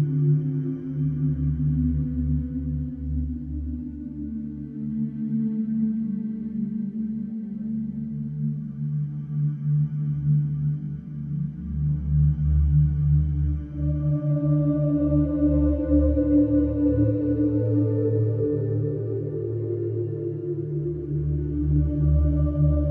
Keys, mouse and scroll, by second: 0.3 click, 2.4 middle click, 2.9 middle click, 2.9 middle click, 3.0 middle click, 3.8 click, 3.8-4.4 scroll, 5.0 click, 5.3-5.6 scroll, 6.1-6.4 scroll, 6.8 click, 7.7 click, 8.2-9.3 scroll, 9.8-10.4 scroll, 11.0 click, 11.4 click, 11.8-13.5 scroll, 13.7 click, 14.1 scroll, 14.8 click, 15.1-15.8 scroll, 17.1-18.1 scroll, 18.7 click, 19.4 click, 19.7-21.5 scroll, 21.8-22.8 scroll.